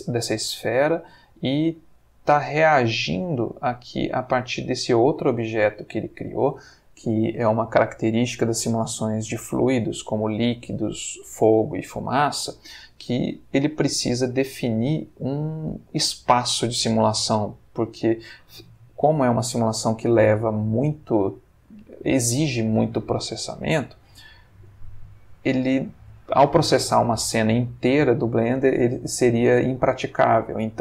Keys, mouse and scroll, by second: 17.6-18.4 middle drag, 23.4-24.1 middle drag.